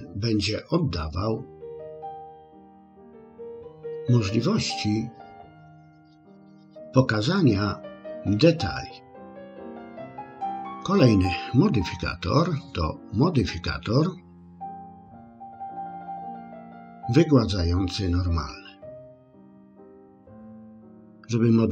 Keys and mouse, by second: 15.7-19.3 drag.